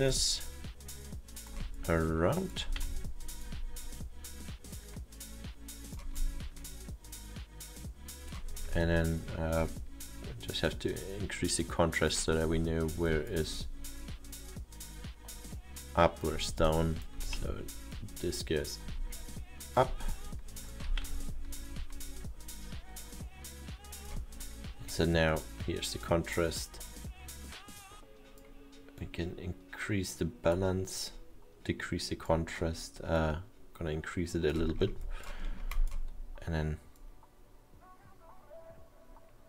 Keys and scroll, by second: 2.7 w, 18.0 e, 21.1 w.